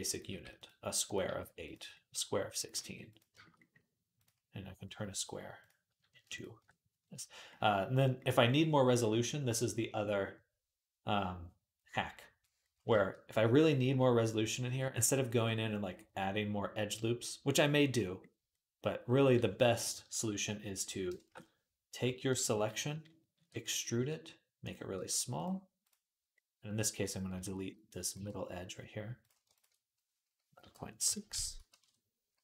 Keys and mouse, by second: 0.1 g, 0.2-4.0 middle drag, 1.1 g, 2.5 g, 4.0 click, 4.9 middle click, 5.4 click, 5.5-13.1 ctrl+middle drag, 23.1 ctrl+shift+e, 23.7 s, 24.7 g, 24.9-32.4 middle drag, 27.1 x, 29.0 click, 29.3 ctrl+click.